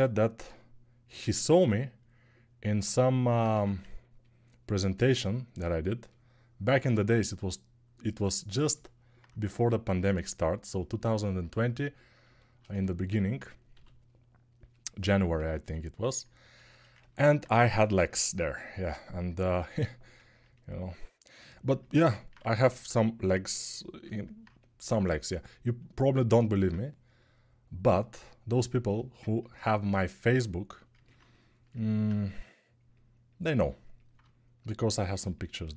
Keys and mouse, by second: 3.3 1, 13.5 g, 16.0-21.4 alt+shift+right drag, 21.4-25.1 drag, 22.1 1, 25.1 ctrl+alt+right click, 26.0-35.7 alt+drag, 32.0 g.